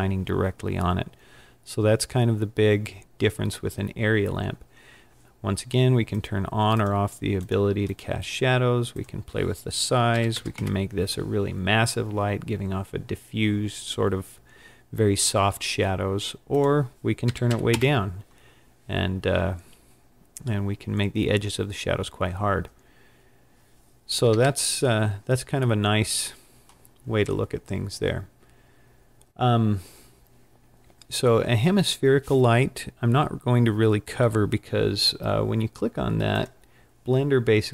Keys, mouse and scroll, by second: 1.4-3.2 scroll up 15, 6.2 click, 6.8 click, 7.5 click, 7.9 click, 9.0 click, 10.6 click, 16.6 click, 17.8 click, 24.3 KP_5, 25.9 middle click, 27.4 scroll down 2, 28.4 scroll down 1, 36.4 click.